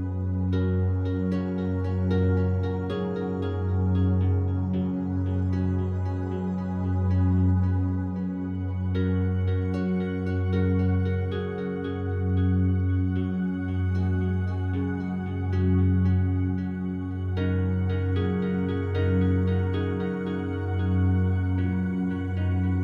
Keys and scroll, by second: 2.8 5, 3.0 Return.